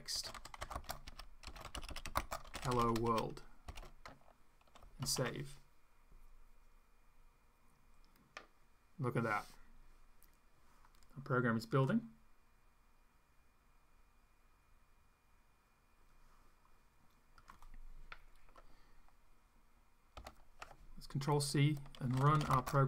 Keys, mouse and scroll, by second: 0.0-3.7 typing, 5.0 ctrl+s, 17.5 click, 20.2 ctrl+c, 21.8-22.8 typing.